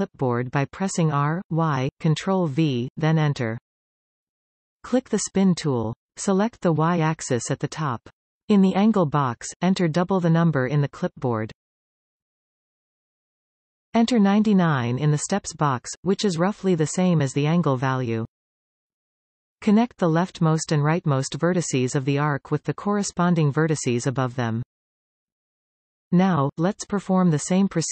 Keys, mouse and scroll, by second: 0.1 r, 4.4 click, 6.3 click, 8.4 click, 10.3-16.2 drag, 16.2 9, 21.2 shift+click, 22.2 f, 22.8 click, 23.5 shift+click, 24.4 f.